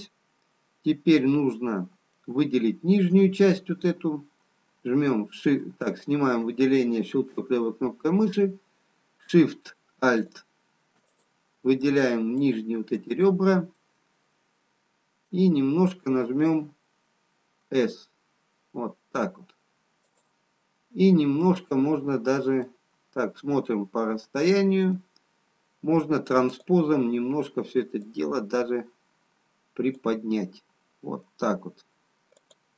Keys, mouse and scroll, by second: 4.0 middle click, 4.0 scroll up 1, 5.9 click, 10.5 alt+shift+click, 11.4 click, 12.4 alt+shift+click, 15.8 middle click, 17.7 s, 22.8 middle click, 26.8 click, 31.7 middle click, 31.7-32.7 scroll down 2.